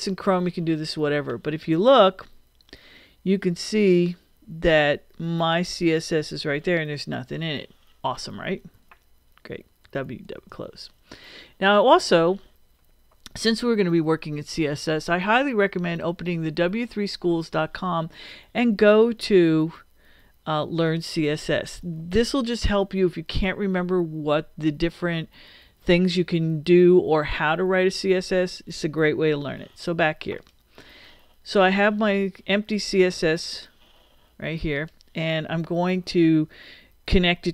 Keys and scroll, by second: 9.8 super+w.